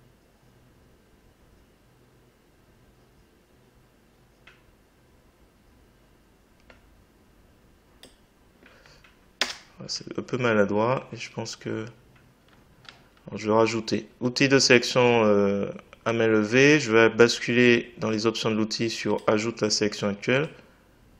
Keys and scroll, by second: 9.4 Return.